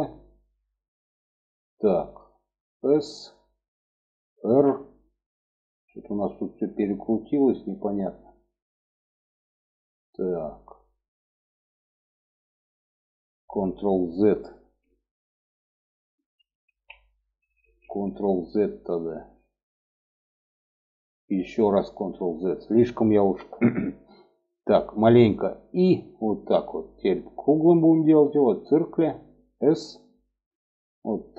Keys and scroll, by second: 2.1 s, 3.9 r, 15.5 ctrl+z, 16.0 ctrl+z, 20.8 ctrl+z, 24.6 i, 29.0 s.